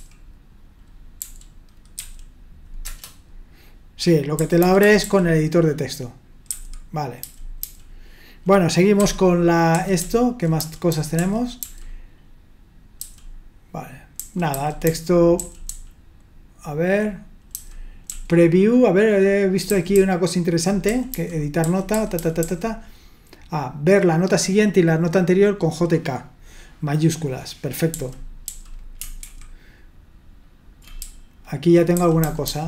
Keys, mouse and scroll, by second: 1.2-2.0 typing, 2.8 Return, 4.3-5.0 typing, 6.5-7.6 typing, 9.0-11.6 typing, 13.0 typing, 14.2-18.1 typing, 19.6-22.4 typing, 27.9-28.4 typing, 29.2 ctrl+d, 31.0-31.9 typing.